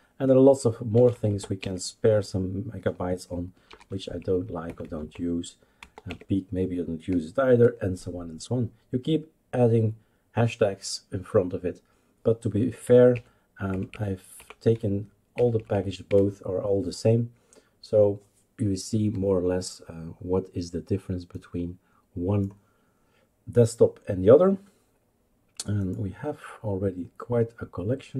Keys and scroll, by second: 0.9 Down, 1.1 Down, 1.3 Down, 1.6 Left, 3.7 #, 4.6 Down, 4.8 Down, 5.0 Down, 5.8 Down, 6.0 typing, 13.1 Up, 13.7 Up, 13.9 Up, 14.3 Up, 14.7 Delete, 15.3 Up, 15.5 Up, 15.7 Up, 16.1 Delete.